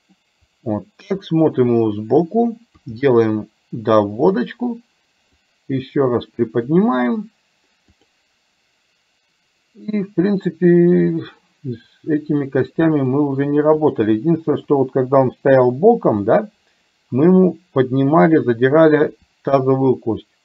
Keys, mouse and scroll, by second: 1.1 KP_3, 2.8 r, 5.6-6.7 drag, 8.0 click, 11.1-13.2 middle drag, 13.7 click, 14.7 KP_1, 16.2-18.3 middle drag, 19.1 r.